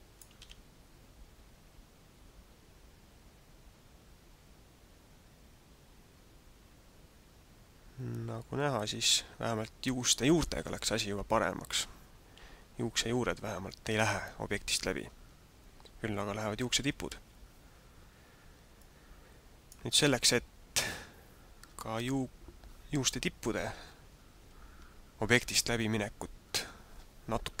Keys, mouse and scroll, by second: 0.3 alt+a, 17.2 alt+a, 18.7 click.